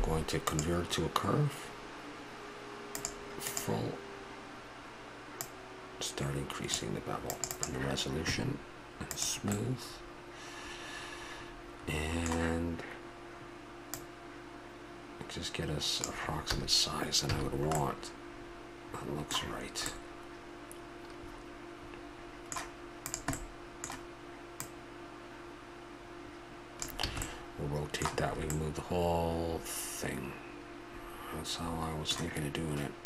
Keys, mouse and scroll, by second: 5.4-9.6 drag, 9.6-11.5 middle drag, 13.9-15.8 drag, 17.3 a, 17.5-20.4 middle drag, 20.7-21.6 middle drag, 21.9-23.1 middle drag, 23.6 middle click, 27.1 a, 27.3-28.6 middle drag, 28.7-30.0 middle drag.